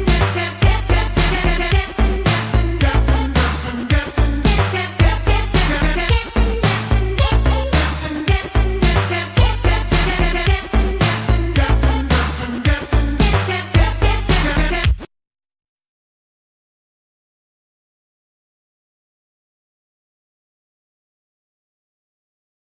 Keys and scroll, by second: 3.0 F19, 14.7 space.